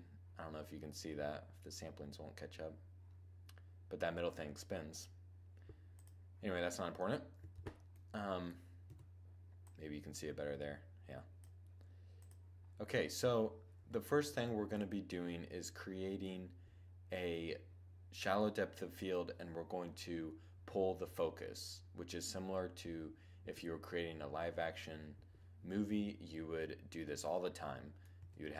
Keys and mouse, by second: 5.6-7.5 drag, 7.3 shift+z, 8.7 z, 9.3-11.3 drag, 11.9-13.5 drag, 13.5 2, 13.5-14.2 middle drag, 17.0-18.9 middle drag, 26.9-27.9 middle drag, 27.9 2.